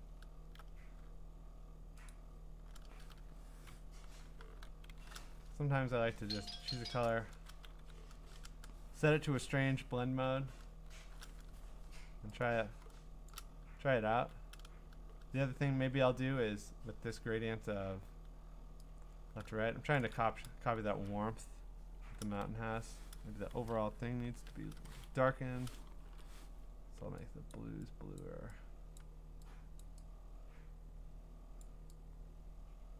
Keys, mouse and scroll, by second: 2.1 click, 2.3 click, 2.3 b, 4.5 alt+shift+s, 4.9 alt+shift+f, 7.1 click, 7.3 ctrl+z, 7.7 g, 10.2 alt+shift+o, 10.8 alt+shift+f, 13.3 shift+click, 14.1 ctrl+z, 19.9 shift+click, 22.2 ctrl+z, 24.2 ctrl+i, 25.2 Escape, 26.0 ctrl+l, 26.0 ctrl+b, 27.5 click, 28.2 click, 29.0 click, 29.8 click, 31.6 click.